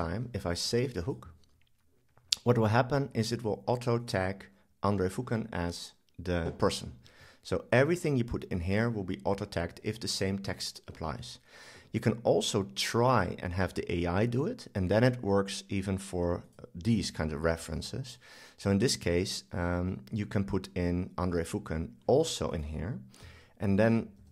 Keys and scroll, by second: 23.3 super+c, 24.2 super+v.